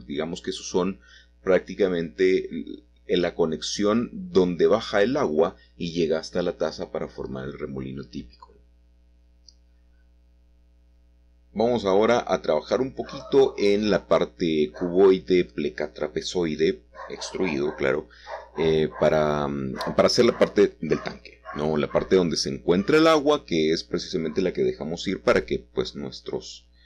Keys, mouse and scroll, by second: 0.9-1.8 scroll down 1, 1.8-3.3 scroll down 1, 3.5-6.4 drag, 6.7-7.8 middle drag, 8.6 click, 8.8-11.2 middle drag, 11.4-12.6 drag, 14.0 s, 15.5 click, 22.4 click, 22.9 middle click, 23.5-25.4 middle drag, 25.7 7.